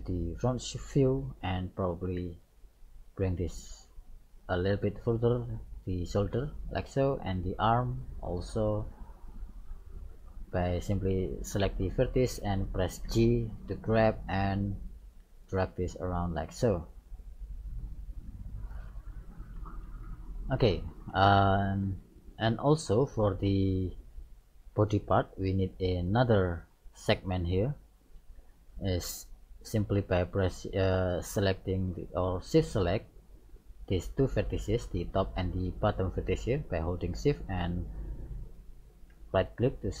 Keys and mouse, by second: 1.2 right click, 2.3 g, 6.5 right click, 7.0 g, 8.7 right click, 9.0 g, 13.1 g, 15.4 right click, 15.7 g, 18.0 right click, 18.2 g, 19.8-24.9 middle drag, 25.6-27.6 middle drag, 29.3-31.6 middle drag, 34.5 right click, 38.7-40.0 right drag.